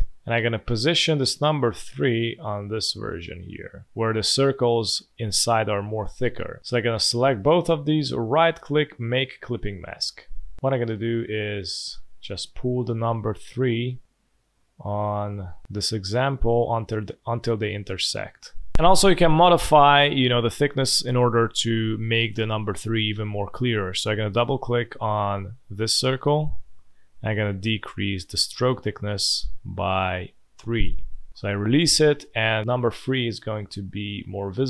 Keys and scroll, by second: 10.0 space, 33.8 space.